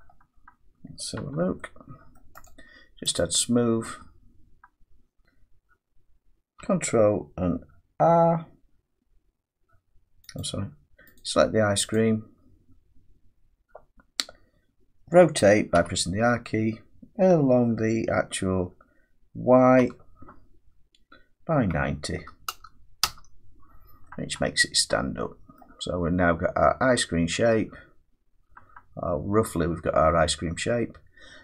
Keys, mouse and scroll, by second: 1.0 scroll up 3, 1.2 Tab, 2.2 middle click, 2.5 right click, 3.2 click, 3.6 middle click, 5.2 Tab, 5.2 middle click, 5.2 click, 6.6 r, 10.4 click, 11.2 click, 11.9 click, 15.7 r, 19.8 y, 21.6-23.0 typing, 25.5 middle click, 25.9-26.5 scroll up 3, 26.5-27.4 scroll down 1, 27.4 middle click.